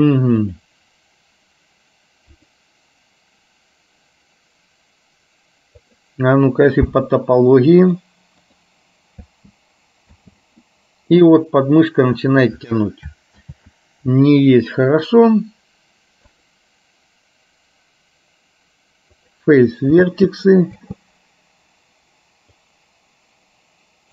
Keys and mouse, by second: 0.5 click, 2.7-6.2 drag, 8.0 click, 9.4 space, 10.3 space, 10.8 middle click, 13.7 ctrl+z, 16.5-19.5 drag, 20.2 space, 20.8 space, 22.8-24.1 drag.